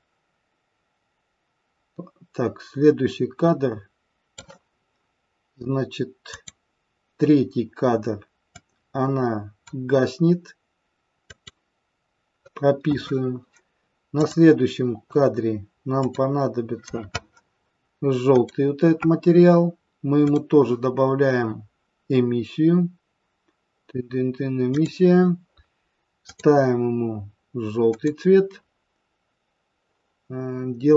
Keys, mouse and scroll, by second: 6.3 click, 8.4 click, 11.2 click, 14.2 click, 16.0 click, 18.2 click, 20.2 click, 26.3 click.